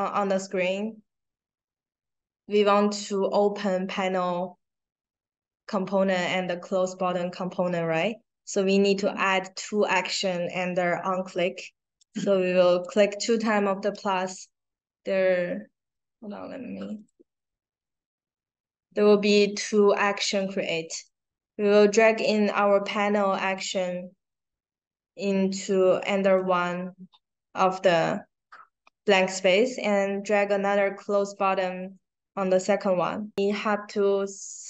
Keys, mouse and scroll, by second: 0.5-1.3 scroll down 5, 8.2-8.5 scroll down 2, 11.9 click, 12.8 click, 14.2-15.1 scroll down 4, 16.0 scroll up 2, 16.9 click, 18.0 click, 22.1-26.2 drag, 29.9-32.5 drag.